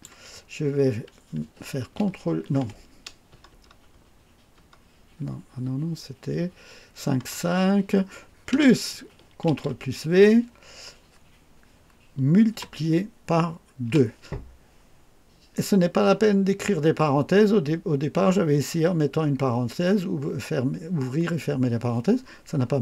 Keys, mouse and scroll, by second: 2.0 ctrl+v, 3.3 BackSpace, 7.2 BackSpace, 8.5 KP_Add, 9.5 ctrl+v, 12.5 KP_Multiply, 13.9 KP_2.